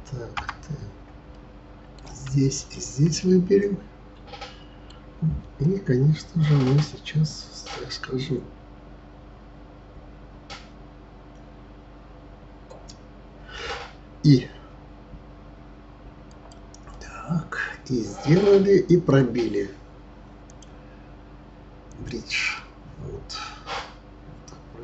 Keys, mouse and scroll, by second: 0.4 Tab, 1.3-2.6 middle drag, 2.6 shift+click, 3.2-6.2 middle drag, 16.9-19.9 middle drag, 20.4-22.5 drag, 22.5-24.8 middle drag.